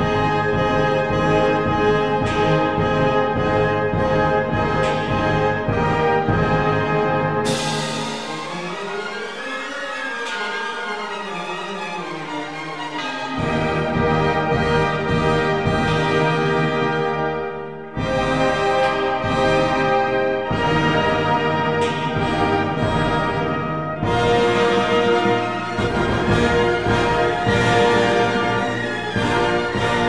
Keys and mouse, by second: 1.2 ctrl+r, 2.6 click, 3.5 click, 5.2 Tab, 7.5 Tab, 14.1 ctrl+r, 16.0 click, 16.4 ctrl+r, 18.4 click, 18.5 Tab, 21.0 Tab, 24.1 ctrl+r, 27.7 ctrl+r.